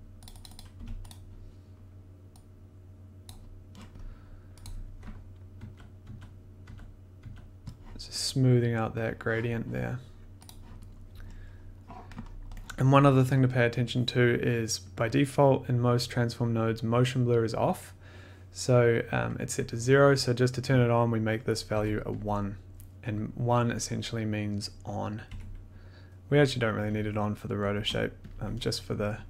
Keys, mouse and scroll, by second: 0.2 click, 0.4 click, 0.5 click, 0.7 1, 1.1 click, 3.2 click, 4.6 click, 5.5-7.1 typing, 10.4 click, 11.5 middle click, 11.5 middle click, 11.6-12.2 scroll, 12.3-12.6 scroll, 14.9 click, 15.0 click, 15.0 click, 15.2 click, 20.2 click, 21.5 click, 21.7 1, 22.1 click, 23.6 click, 23.7 click, 23.7 click, 23.8 click, 25.1 click, 25.3 1, 27.0 click, 27.7 0, 28.3 click, 29.0 click, 29.1 click, 29.2 click.